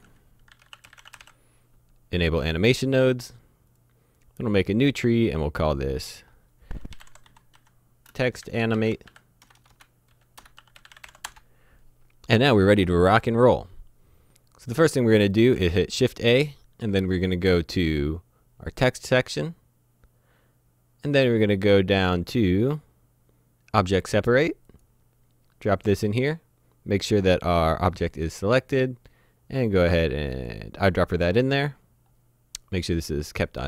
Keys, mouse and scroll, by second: 0.5-1.2 typing, 3.7 click, 6.9-11.0 typing, 11.3 Return, 15.3 click, 15.5 shift+a, 24.7 click, 30.3 click, 31.4-32.3 scroll up 1.